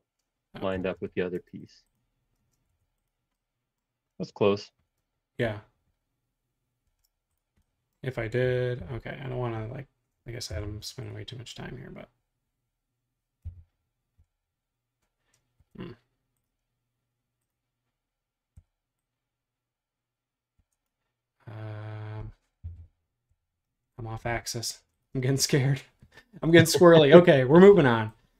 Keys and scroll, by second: 0.5-2.4 typing, 2.7 Escape, 6.8 super+z, 8.8 q, 10.1-10.5 typing, 13.5 Page_Down, 14.1 Page_Down, 15.6 Escape, 18.6 q, 20.5 Escape, 22.6 Left, 23.3 Right, 24.7 space, 27.6 e.